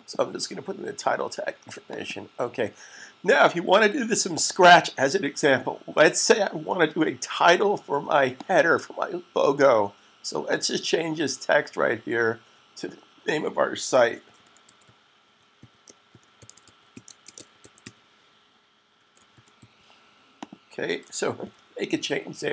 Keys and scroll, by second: 14.5 typing, 16.4-19.7 typing, 21.7 super+s.